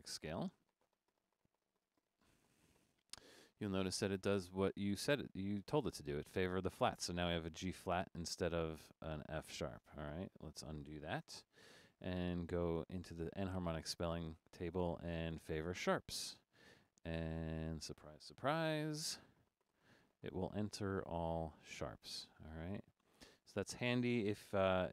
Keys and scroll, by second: 10.1 Escape, 23.0 Escape, 24.3 BackSpace.